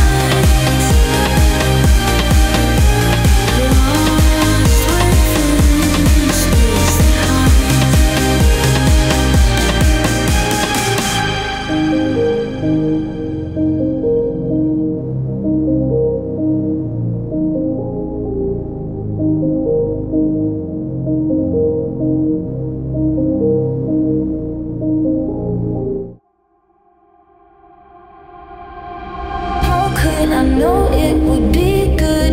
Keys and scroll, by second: 5.8 space, 8.9 ctrl+g.